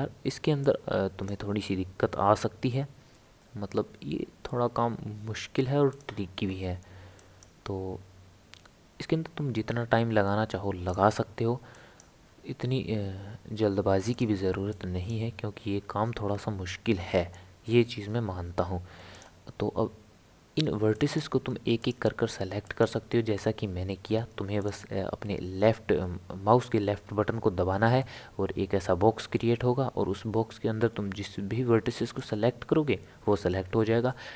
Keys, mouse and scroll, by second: 0.6 click, 3.0 g, 7.2 click, 7.9 g, 11.7 click, 12.2 g, 14.7 click, 15.2 g, 20.9 click, 21.8 click, 22.6 click, 24.6 click, 28.0 click.